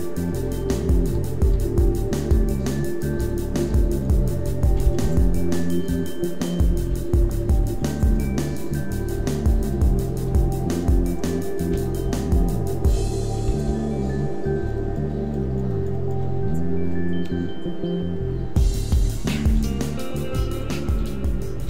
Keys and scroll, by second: 0.2 Tab, 0.5-6.7 typing, 8.1 r, 9.0 r, 10.1 r, 11.6 Tab, 11.9 a, 12.8 Tab, 13.3 ., 13.5 s, 16.1 Tab, 16.3 a, 18.9 Tab, 19.5 w, 20.3 x, 20.7 Tab, 20.9 a.